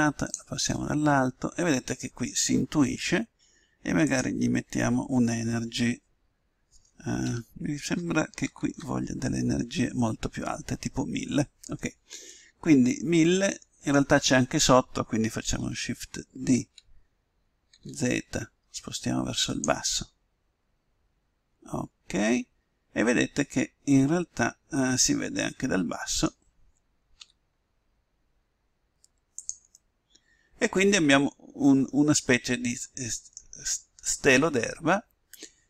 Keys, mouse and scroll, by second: 0.7-4.0 middle drag, 4.0-5.7 drag, 12.3-13.9 middle drag, 16.5 shift+d, 20.0-21.8 middle drag, 27.3 r, 29.7-31.6 middle drag, 34.5-35.6 middle drag.